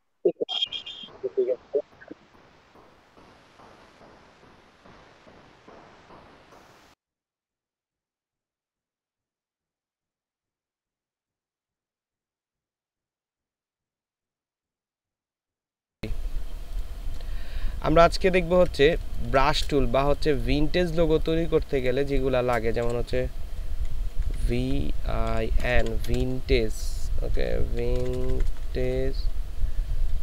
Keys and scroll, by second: 18.4 ctrl+space, 19.0 ctrl+space, 20.4 ctrl+space, 22.9-26.2 typing, 27.3-28.3 typing.